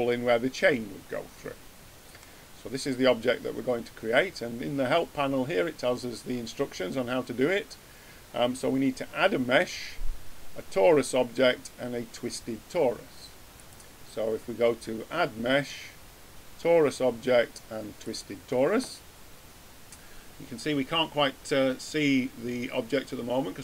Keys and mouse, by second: 0.0-2.0 middle drag, 2.6-13.5 middle drag, 13.5-15.4 drag.